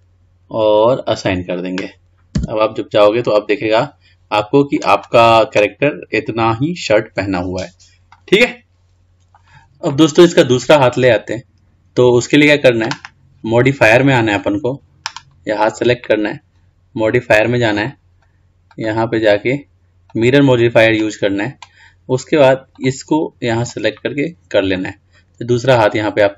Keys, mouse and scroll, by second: 1.3-2.6 drag, 2.6 Tab, 3.3-5.3 middle drag, 5.3 drag, 8.4-9.3 middle drag, 10.1-11.2 middle drag, 11.2-11.7 scroll up 3, 11.7-12.3 scroll down 1, 12.3-14.7 scroll down 2, 14.7 click, 18.0 click, 19.0-22.0 drag, 22.9 click, 26.0-26.3 drag.